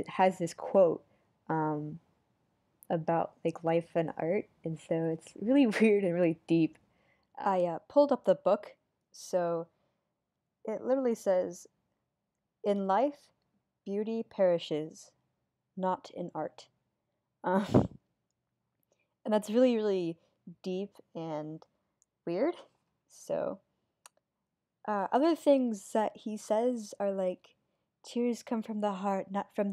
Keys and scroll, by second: 4.4 super+z, 5.0 super+z, 6.0 super+z, 9.3 super+z, 10.1 super+z, 21.5 super+z, 23.7 super+z.